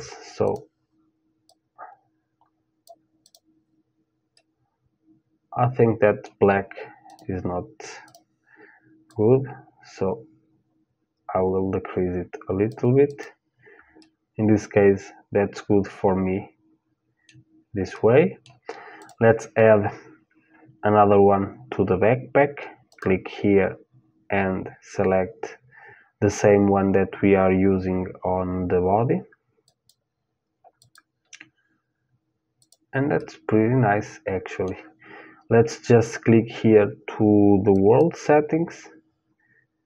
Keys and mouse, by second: 2.9-4.9 drag, 4.5 middle click, 4.9-6.7 middle drag, 6.7-9.7 drag, 12.7-15.1 drag, 15.1 middle click, 17.6-18.6 middle drag, 18.6-20.6 drag, 22.5-29.5 drag, 30.4-34.2 drag, 34.2-37.3 middle drag, 37.3-39.3 drag.